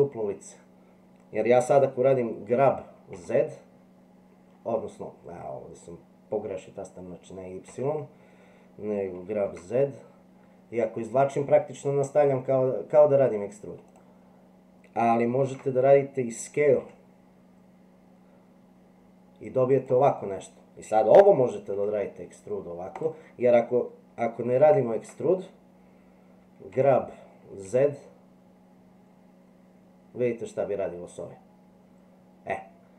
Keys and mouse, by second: 2.5 g, 15.4 ctrl+z, 16.8 s, 21.7 e, 24.6 ctrl+z, 26.7 g.